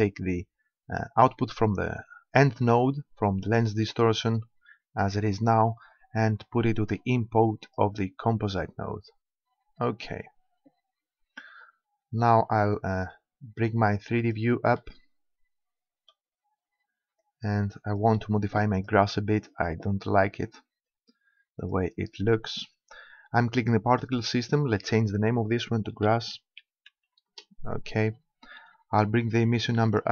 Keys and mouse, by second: 0.4-2.1 drag, 12.6 click, 13.2 click, 16.3 middle click, 17.2-18.8 drag, 18.8-20.5 middle drag, 20.9-22.6 drag, 24.0-26.5 drag, 29.9-30.1 drag.